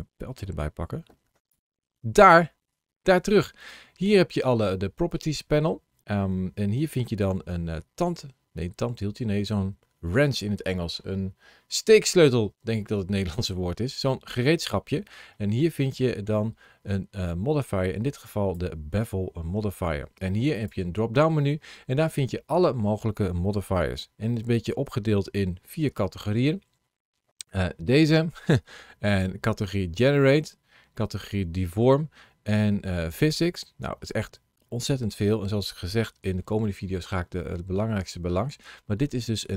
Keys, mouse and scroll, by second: 1.1 ctrl+shift+a, 20.4 click.